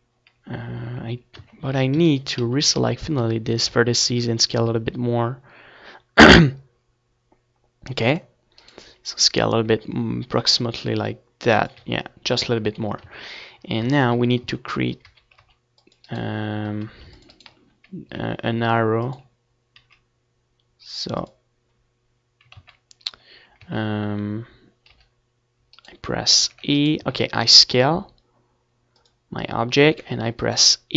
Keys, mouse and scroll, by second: 1.9-3.9 right drag, 2.1 s, 5.0 click, 5.1 z, 5.5-6.7 right drag, 6.5 Tab, 7.2 ctrl+s, 7.4 z, 7.7 Tab, 8.2 a, 8.7 c, 9.4-10.8 right drag, 10.0 c, 11.4 e, 12.4-14.2 drag, 13.2 s, 14.7-16.4 drag, 16.0 ctrl+z, 17.0 ctrl+z, 18.5 g, 19.4-22.2 right drag, 20.2 e, 20.7 s, 22.8-24.4 drag, 23.9 e, 24.4-26.6 middle drag, 25.9 ctrl+z, 27.7-29.3 drag.